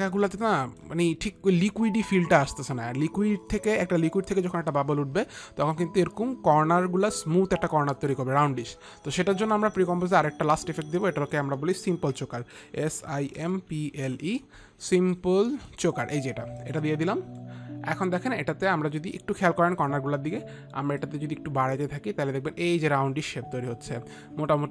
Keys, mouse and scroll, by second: 0.7 space, 0.9 click, 3.8 click, 11.5 click, 12.4-14.3 typing, 13.5 click, 13.8 click, 16.2-17.7 typing, 16.5 click, 17.2 click, 21.5 click.